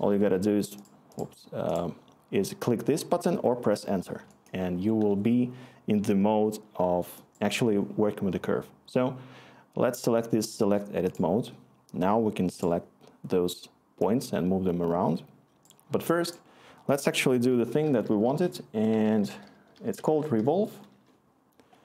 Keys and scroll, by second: 0.2 Return, 17.2 Tab, 17.4-20.8 typing, 20.9 Return.